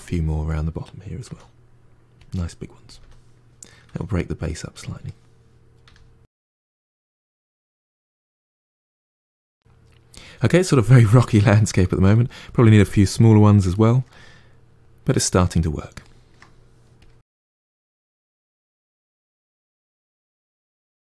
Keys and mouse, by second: 1.1 s, 2.9-5.7 typing, 4.0 middle click, 4.7 middle click, 5.1 middle click, 6.6 middle click, 7.0 r, 7.3 middle click, 7.5 g, 7.7 middle click, 8.2 g, 8.3 middle click, 9.1 click, 9.2-16.9 shift+middle drag, 16.9 click, 17.2-21.1 typing, 17.8 middle click, 17.9 shift+Tab, 18.0 middle click, 18.5 middle click, 18.7 shift+middle click, 19.0 click, 19.1 middle click, 19.6 middle click, 19.8 middle click, 20.0 middle click, 20.4 middle click, 20.7 middle click.